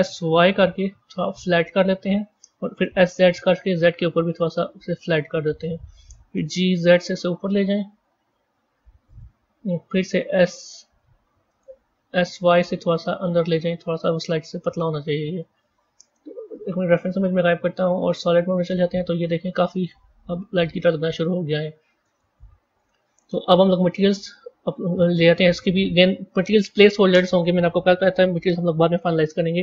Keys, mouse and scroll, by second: 2.7 s, 6.2 g, 10.2 s, 11.8 s, 13.9-16.4 middle drag, 16.4 click, 17.3 z, 18.5-21.6 middle drag, 22.7-23.9 middle drag, 23.9 click.